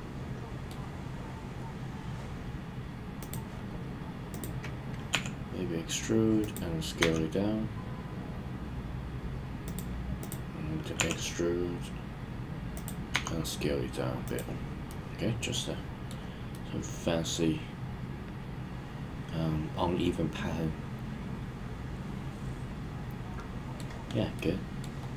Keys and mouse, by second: 3.2 click, 5.1 e, 6.4 click, 7.0 s, 9.6 click, 10.9 e, 12.7 click, 13.1 s, 14.2 click, 14.8-16.1 middle drag, 16.5-23.7 middle drag, 24.3-24.8 middle drag.